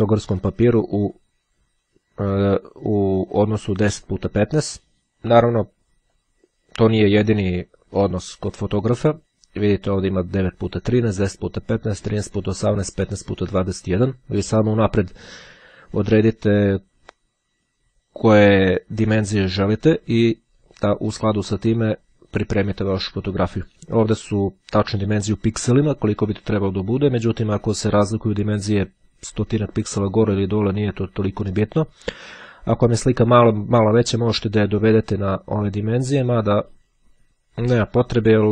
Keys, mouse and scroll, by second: 6.3 click.